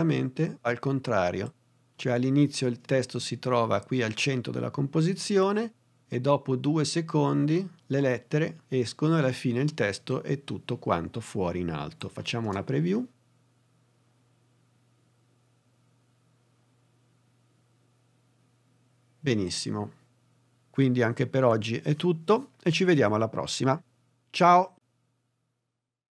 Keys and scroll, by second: 12.3 space.